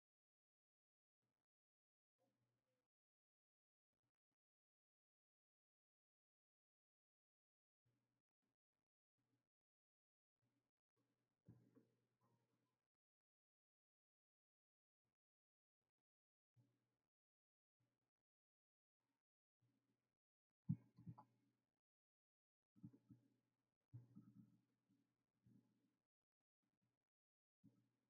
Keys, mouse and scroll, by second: 2.3 right click, 6.0 click.